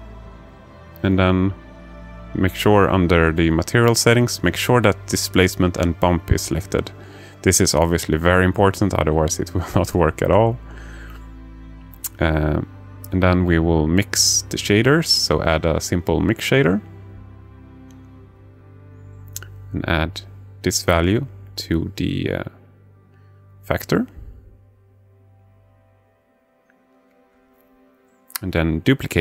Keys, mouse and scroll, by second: 3.6-5.0 drag, 8.9 shift+a, 19.5 click, 20.5-24.4 drag, 25.9 click, 26.6 click, 28.2 shift+d.